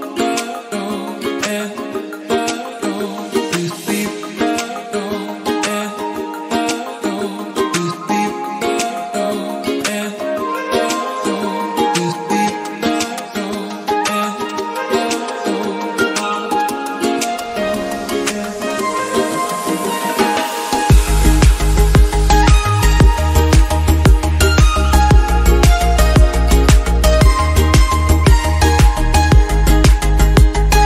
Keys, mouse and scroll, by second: 0.6-1.6 scroll down 1, 1.6-3.4 scroll down 1, 3.9 click, 4.4 scroll down 1, 4.7-5.3 scroll up 2, 5.3 KP_Decimal, 5.5-6.3 scroll down 7, 5.8 middle click, 6.3 s, 7.1-8.3 drag, 8.7 click, 9.6 s, 10.2 click, 10.7 KP_0, 12.1 click, 12.7-13.6 scroll up 2, 13.1 click, 13.6-15.4 drag, 13.6-14.0 scroll down 1, 15.4 KP_7, 15.8-16.1 scroll down 3, 16.1 g, 16.8 r, 17.7 s, 18.6-19.1 middle drag, 19.1 click, 19.6-20.4 scroll down 3, 20.4-20.8 scroll down 1, 20.8-22.2 middle drag, 22.2 KP_1, 22.4-22.8 scroll up 1, 22.8 click, 23.7 s, 25.0 click, 26.7 click, 27.4 KP_0, 30.0 KP_7, 30.7 g.